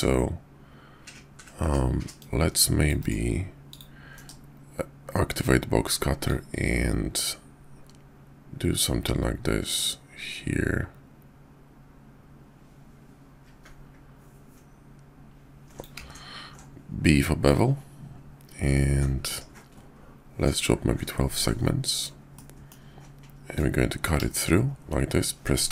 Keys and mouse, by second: 2.0-2.9 drag, 3.0-3.8 right drag, 4.1 alt+w, 6.3-22.0 drag, 22.4-22.7 middle drag.